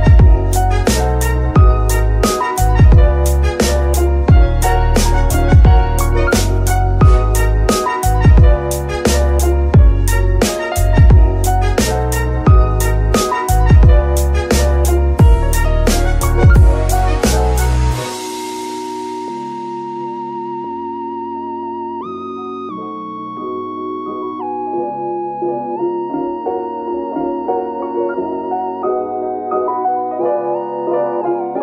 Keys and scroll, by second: 21.0 KP_Divide, 26.7 g, 27.1 Escape, 27.3 r, 28.0 Escape, 31.0 g.